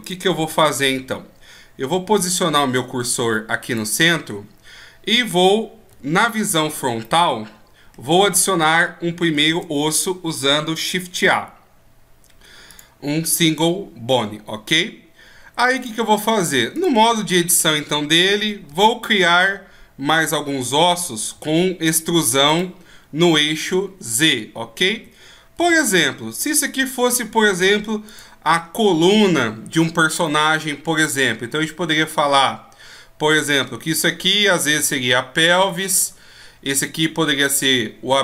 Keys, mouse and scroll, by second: 0.0 click, 0.4 n, 0.9-1.3 scroll up 3, 2.1 shift+s, 4.2 scroll down 1, 5.9 KP_1, 7.0 middle click, 15.7 click, 18.4 e, 21.0 e, 23.8 shift+scroll up 1, 24.9 e, 30.2 scroll down 1, 30.3 middle click, 35.7 right click, 35.9-36.9 scroll up 1, 36.9 right click, 36.9-38.2 scroll up 2.